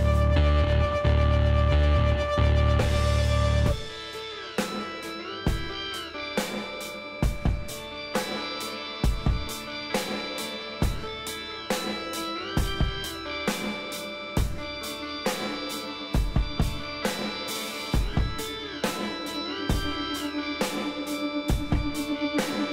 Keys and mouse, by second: 1.4 s, 4.5 click, 5.1-7.7 middle drag, 6.6 KP_3, 9.7 e, 11.4-14.5 middle drag, 12.2 e, 14.5-17.6 drag, 14.8 z, 16.4 b, 17.8-19.5 drag, 20.6-22.5 drag, 21.6 b.